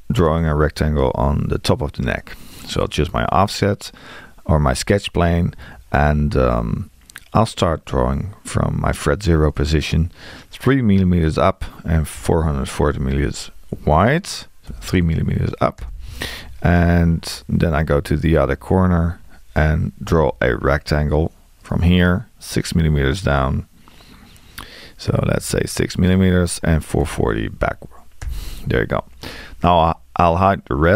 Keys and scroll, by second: 12.2 4, 20.1 r, 25.3 Tab.